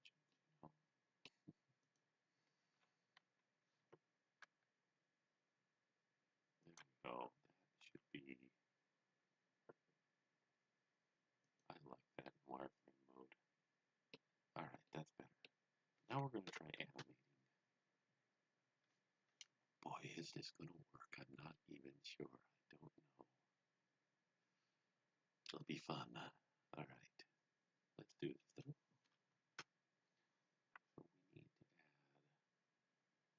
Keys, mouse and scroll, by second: 0.3 middle click, 1.8 click, 2.7 KP_1, 4.3 g, 6.6 click, 7.1-7.9 typing, 11.3 click, 12.3 middle click, 14.5-14.9 scroll down 1, 14.9 middle click, 16.5 KP_1, 29.2 KP_1.